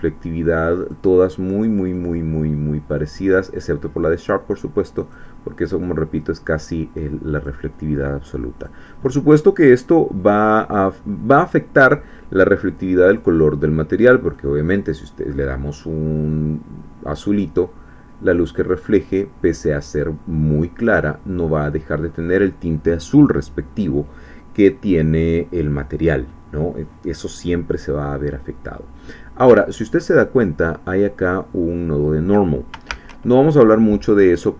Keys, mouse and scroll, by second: 0.8 click, 1.9 click, 3.0 click, 4.1 click, 5.0 click, 7.3 click, 8.6 click, 10.6 click, 13.1 click, 14.3-16.3 middle drag, 17.2-22.2 middle drag, 28.5 scroll down 1, 29.8 click, 30.5-32.7 middle drag, 32.9 shift+a.